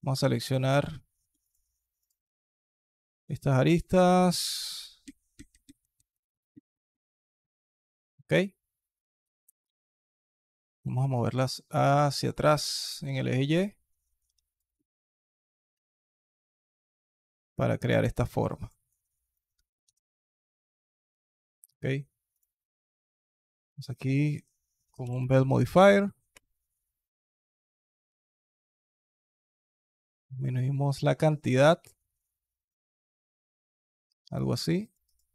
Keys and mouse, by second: 0.5 click, 1.2 shift+click, 3.0 shift+click, 3.6 shift+click, 9.0 alt+click, 9.6 alt+click, 10.6 g, 14.7 alt+click, 16.8 g, 18.7 alt+click, 19.4 alt+click, 19.6 Tab, 20.0 alt+click, 21.0 alt+click, 22.2-22.8 drag, 27.2 alt+drag, 28.0 alt+click, 29.3-31.0 shift+drag.